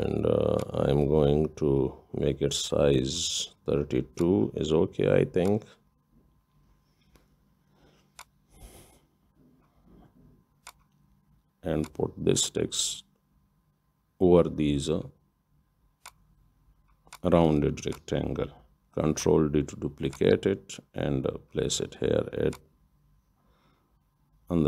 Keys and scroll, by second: 21.2 ctrl+d.